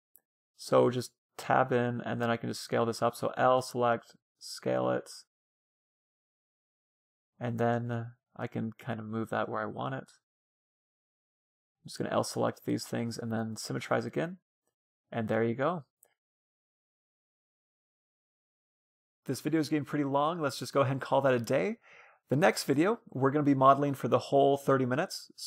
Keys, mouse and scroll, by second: 0.0 Tab, 0.6-2.6 middle drag, 1.6 a, 2.4 l, 3.0 s, 4.7 s, 7.1-10.0 drag, 9.8-13.2 typing, 10.0 middle click, 14.5 a, 14.8-23.2 middle drag, 15.1 Tab.